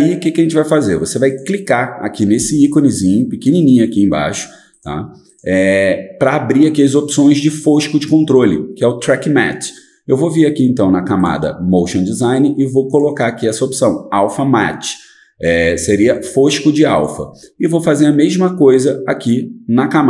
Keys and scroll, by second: 0.0-1.5 typing.